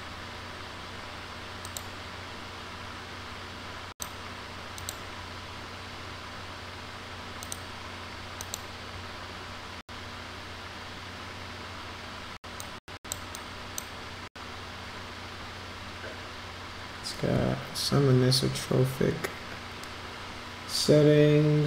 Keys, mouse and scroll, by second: 4.0 click, 4.8 click, 8.5 click, 12.7-13.2 drag, 13.4-13.8 drag.